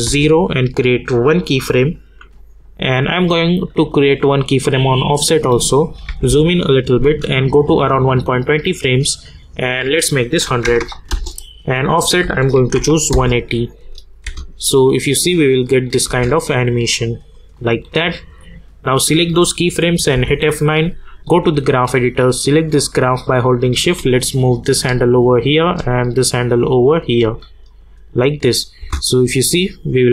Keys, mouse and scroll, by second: 0.0 Return, 1.2 click, 4.6 click, 6.1 =, 6.3 =, 7.9 click, 11.1 Return, 12.0 click, 13.1 Return, 13.8 click, 15.1 space, 16.9-20.1 drag, 20.1 F9, 21.1-25.8 drag, 25.8-27.7 drag, 28.8 space.